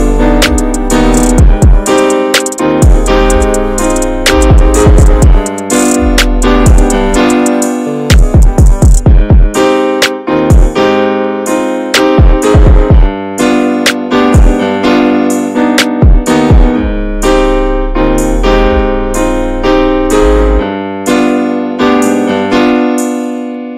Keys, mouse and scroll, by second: 0.1-0.8 scroll down 10, 0.8 shift+middle click, 1.1 scroll up 1, 1.2 scroll down 1, 1.5 middle click, 2.0-2.5 scroll up 1, 2.5 shift+middle click, 2.7-3.2 scroll up 1, 3.4 middle click, 4.8 shift+middle click, 5.2-5.8 scroll up 2, 5.8-9.8 shift+middle drag, 9.8-12.4 drag, 12.4-13.2 scroll down 9, 13.2 shift+middle click, 13.6 scroll up 3, 14.0 shift+middle click, 14.2-14.8 scroll up 1, 14.8 shift+middle click, 15.1-17.0 scroll up 1, 17.0 click, 17.3-18.1 scroll down 6, 18.1 shift+middle click, 18.5-18.9 scroll up 2, 18.9 shift+middle click, 19.2-19.7 scroll up 2, 19.7-23.7 shift+middle drag.